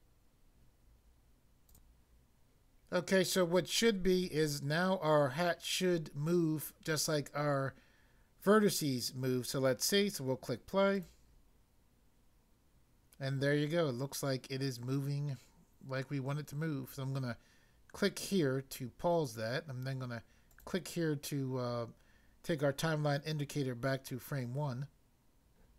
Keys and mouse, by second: 1.7 click, 1.7 click, 11.0 click, 18.2 click, 20.5 click.